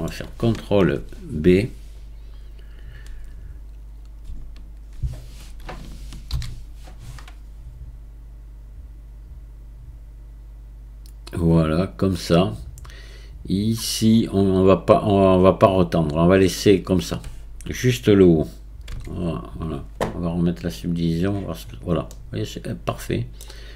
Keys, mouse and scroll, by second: 6.3 ctrl+b, 12.4-13.8 scroll up 2, 14.1-14.7 scroll down 2, 14.7-15.3 scroll down 1, 21.0 click, 21.7 scroll down 4, 22.1-23.4 middle drag, 23.4-23.7 scroll down 6.